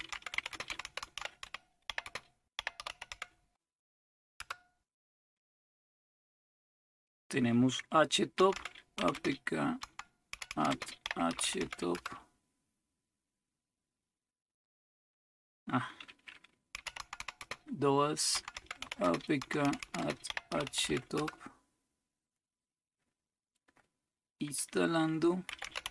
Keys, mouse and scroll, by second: 0.0-3.6 typing, 4.4 Return, 8.2-12.1 typing, 16.6-21.3 typing, 25.2-25.9 typing.